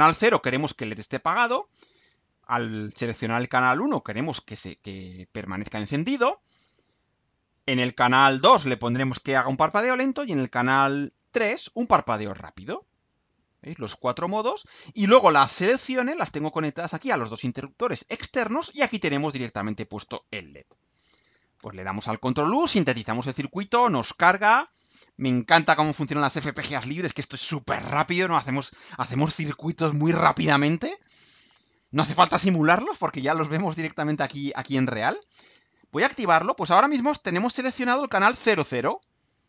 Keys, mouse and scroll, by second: 20.8 ctrl+u.